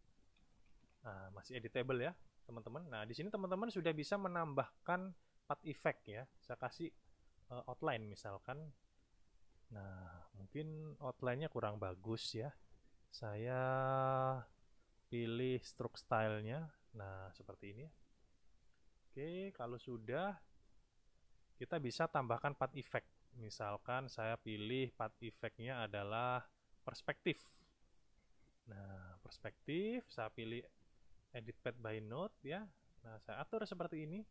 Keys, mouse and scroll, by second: 0.3 i, 0.5 n, 0.7 a, 0.8 h, 2.9 click, 3.9 click, 8.9 shift+click, 11.3 click, 15.5 click, 16.5 click, 19.7 click, 20.6 click, 21.5 click, 22.8 click, 24.0 click, 25.5-27.6 drag, 28.1 click, 30.6 click, 32.4 click, 34.2-34.3 drag.